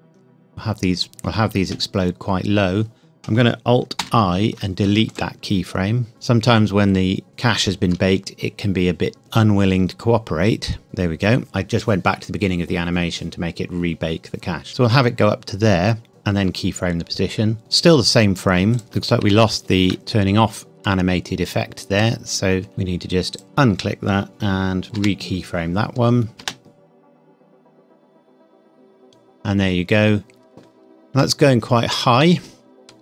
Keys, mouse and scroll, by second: 1.1 click, 4.0 alt+i, 5.1 click, 7.3 click, 9.2 space, 10.8 click, 16.1 i, 18.7 click, 19.3 shift+middle click, 19.9-21.5 scroll up 2, 26.3 click, 26.4 space, 29.3 scroll down 1, 30.2 scroll down 1, 31.5 shift+middle click.